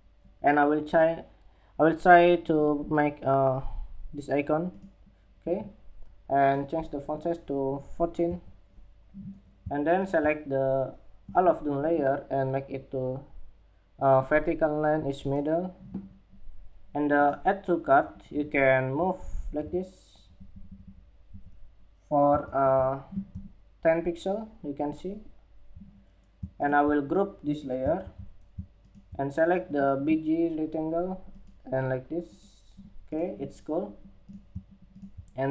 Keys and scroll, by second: 21.9 super+=, 27.5 super+g.